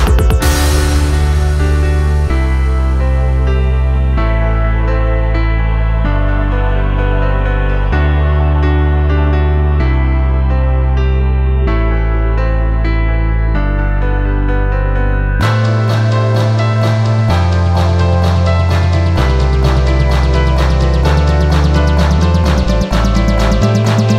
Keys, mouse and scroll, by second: 20.2 ctrl+j.